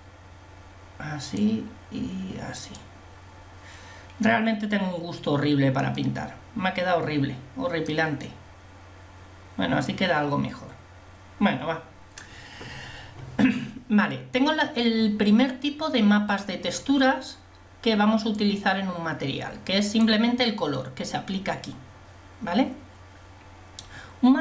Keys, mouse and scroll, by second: 0.0 click, 2.8 click, 6.9-8.1 drag, 18.8 click, 19.4-19.9 scroll up 2.